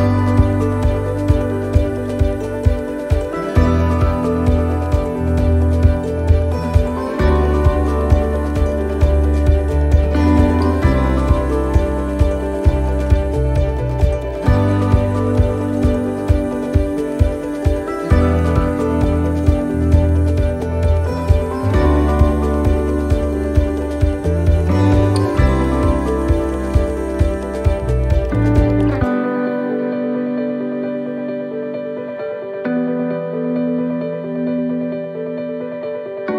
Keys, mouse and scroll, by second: 0.4 f, 0.8 middle click, 1.3 scroll down 2, 1.8 shift+middle click, 2.4 middle click, 2.8 scroll up 1, 3.2 shift+middle click, 4.5 ctrl+r, 7.6 ctrl+r, 11.4 right click, 12.5 click, 13.2 right click, 13.9 shift+right click, 14.7 x, 16.1 right click, 17.2 click, 17.5 click, 18.5 right click, 19.5 shift+right click, 20.5 f, 21.3 right click, 22.2 shift+right click, 23.5 f, 24.3 right click, 25.6 click, 28.0 ctrl+z, 29.5 alt+shift+right click, 30.5 click, 34.5 right click, 35.4 middle click.